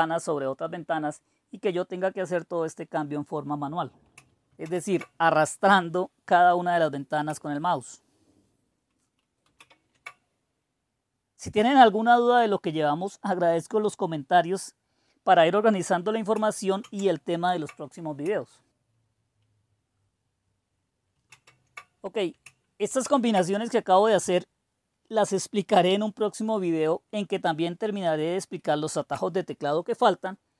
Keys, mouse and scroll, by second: 4.5 super+2, 9.5 super+6, 16.7 super+1, 21.2 super+2, 22.9 super+6.